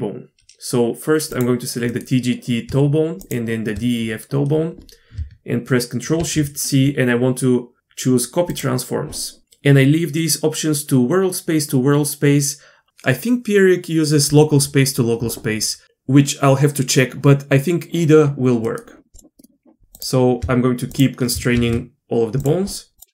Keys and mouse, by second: 1.4-1.9 drag, 1.9-2.4 middle drag, 6.2 ctrl+shift+c, 19.9 click, 21.0-21.3 shift+drag, 21.5 ctrl+shift+c, 23.0-23.1 drag.